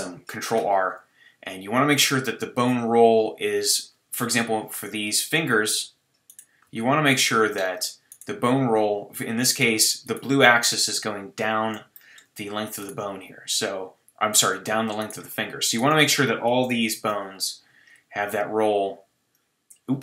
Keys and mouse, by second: 0.5 ctrl+r, 6.7-9.8 drag, 6.7 g, 12.1-16.8 middle drag, 16.8 ctrl+r.